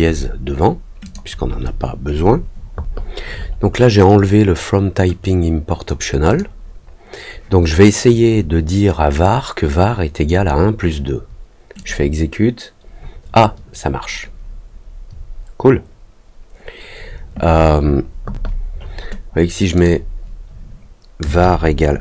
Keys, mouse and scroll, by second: 1.0 click, 5.2 click, 6.2 click, 9.2-10.2 drag, 11.7 click, 19.7 click.